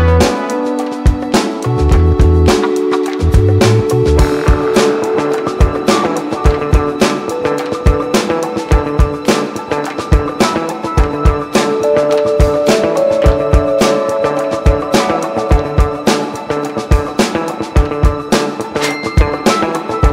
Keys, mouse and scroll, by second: 6.2 click, 10.9 click.